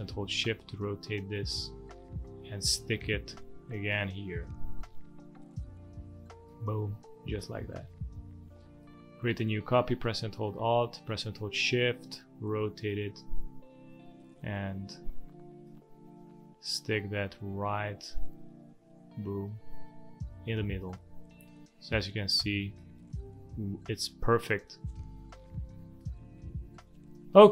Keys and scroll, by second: 7.3 space, 8.5 space, 25.7 space.